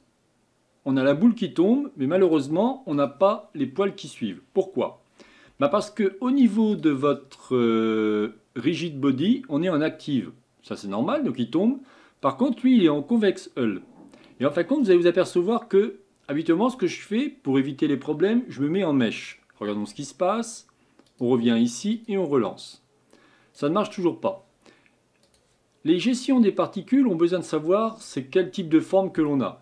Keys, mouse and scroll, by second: 14.8 click, 21.1-28.4 drag.